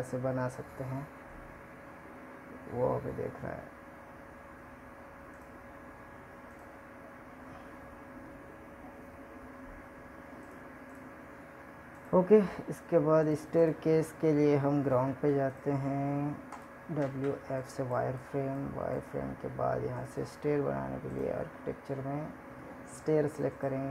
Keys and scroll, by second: 11.0 ctrl+Tab.